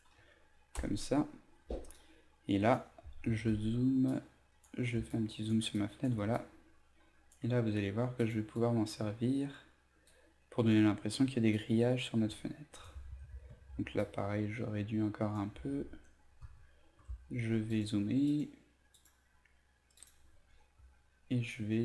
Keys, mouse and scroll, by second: 1.6 v, 1.9 click, 3.4 ctrl+z, 4.1-12.8 drag, 14.0 alt+shift+click, 16.4 ctrl+z, 17.0 ctrl+space, 17.5 ctrl+space, 17.6 ctrl+space, 21.5-21.8 drag.